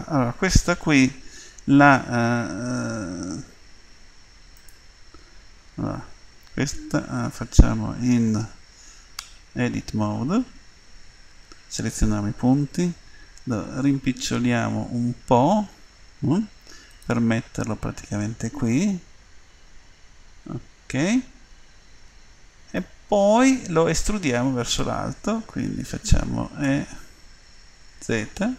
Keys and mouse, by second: 2.6 s, 9.2 Tab, 11.3 a, 12.8 s, 17.6-20.7 middle drag, 26.6 e.